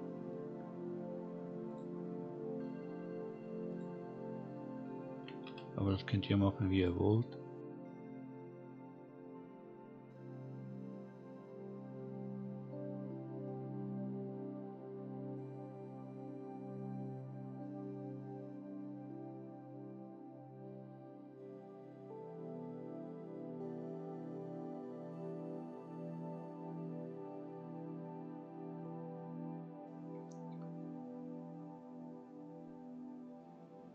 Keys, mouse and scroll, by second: 1.7 click, 3.0-3.7 scroll down 1, 3.7 click, 5.1 g, 7.2-7.6 scroll down 1, 9.4 click, 10.4 click, 12.3 scroll up 1, 13.1 scroll up 2, 30.3 scroll down 2, 31.4-32.3 scroll up 3.